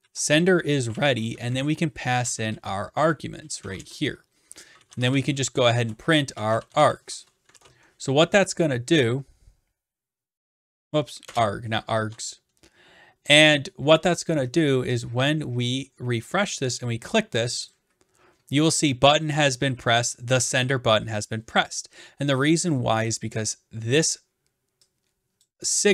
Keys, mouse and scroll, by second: 0.0 ctrl+v, 1.3-7.3 typing, 7.5 ctrl+s, 11.3 BackSpace, 12.0 ctrl+s, 15.1 click, 17.7 click, 21.2 click, 22.7 click, 25.4 click.